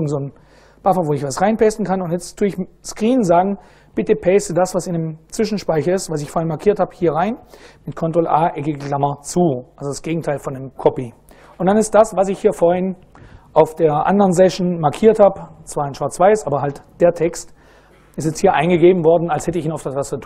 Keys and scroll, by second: 7.8 ctrl+a, 9.1 ].